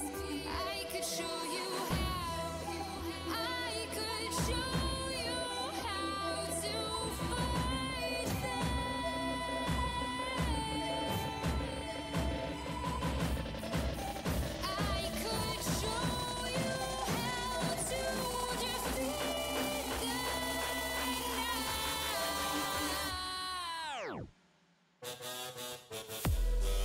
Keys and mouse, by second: 3.7 click, 4.7-19.7 drag, 20.0-22.7 right drag, 24.2-26.7 drag, 24.2-26.7 right drag.